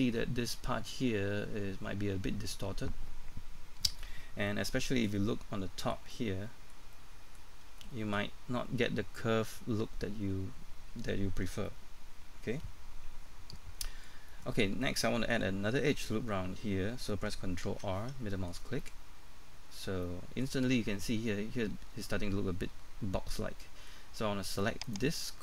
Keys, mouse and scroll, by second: 4.5 middle click, 7.5 scroll up 1, 8.6 shift+middle click, 18.3 middle click, 24.8 right click, 25.3 scroll down 1.